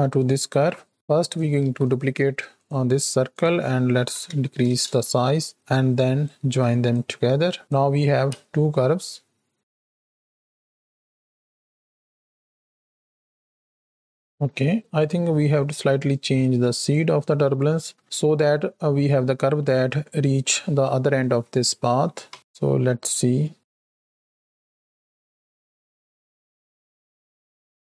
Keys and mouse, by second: 0.6 shift+Left, 0.9-2.6 drag, 0.9 shift+d, 0.9 x, 1.6 shift+d, 3.3-4.7 drag, 5.6 ctrl+shift+click, 6.8 click, 8.3 space, 14.8 space, 14.9 click, 22.3 shift+Right, 22.3 shift+Left, 22.3 space.